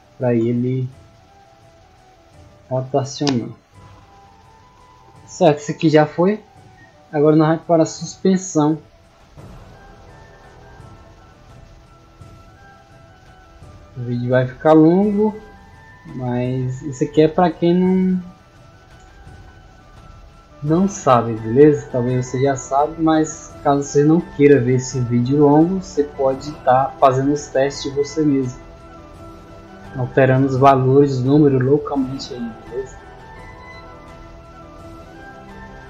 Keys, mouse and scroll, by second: 3.0 middle click, 3.4 middle click, 4.1 middle click, 5.9 middle click, 7.3 click, 9.5 click, 10.3-11.0 scroll up 2, 11.1-12.0 scroll up 6, 12.2 scroll up 2, 12.6 scroll down 2, 14.1 click, 15.0 scroll down 1, 15.9 scroll up 1, 16.3 scroll down 1, 22.1 click, 26.0 click, 27.7-28.7 drag, 29.2 scroll down 1, 30.6 scroll down 1, 33.8 click, 35.0 click, 35.6-35.8 scroll up 2.